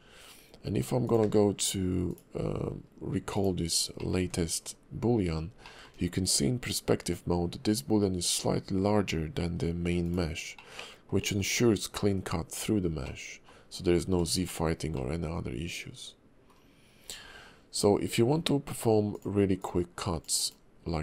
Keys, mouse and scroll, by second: 1.0 click, 1.2 q, 3.7 scroll up 1, 4.0 middle click, 4.2 `, 4.7 KP_5, 5.3 scroll up 1, 5.6 shift+middle click, 10.0 click, 10.6 middle click, 11.4 KP_5, 12.6-13.0 scroll down 2, 13.0 middle click, 14.5 shift+middle click, 14.9 middle click, 16.8 scroll down 1, 17.0 KP_5, 17.4-17.9 scroll up 2, 18.0 KP_5, 19.1 click, 19.6 click.